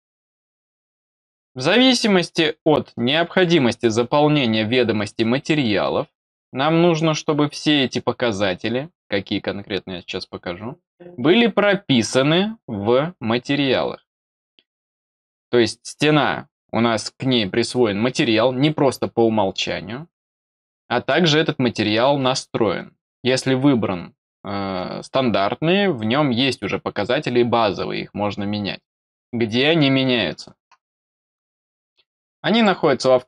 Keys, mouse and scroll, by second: 31.4 click, 32.5 click.